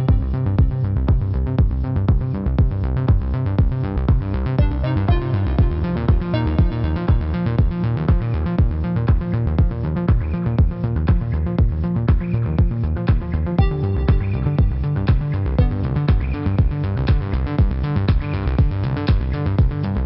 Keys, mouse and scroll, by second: 1.9 click, 2.7 v, 3.8 click, 12.6 click, 14.6 right click, 15.4 click, 18.0 click.